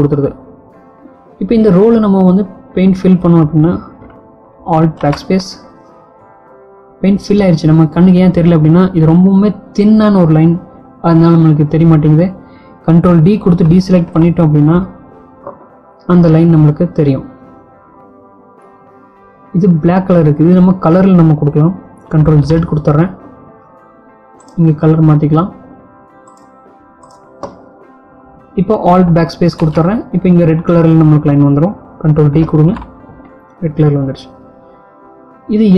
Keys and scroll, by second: 5.3 alt+BackSpace, 12.9 ctrl+d, 21.3 ctrl+z.